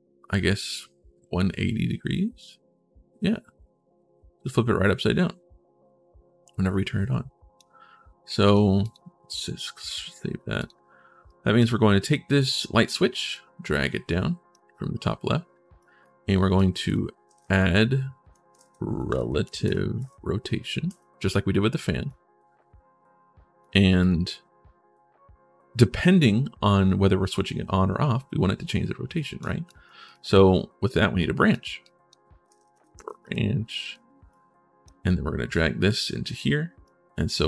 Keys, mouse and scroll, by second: 6.6 click, 8.2 click, 8.6 click, 8.7 3, 10.4 click, 11.0 click, 12.1 click, 12.6 click, 13.1-14.3 drag, 15.6 click, 16.3 click, 16.8-20.2 typing, 20.6 click, 21.8-23.4 drag, 23.8 click, 29.0 click, 29.4 click, 29.8 click, 30.9 click, 31.6 click, 32.0-33.3 typing, 33.6 click, 34.1 click, 35.3 click, 36.6 click, 36.6 right click.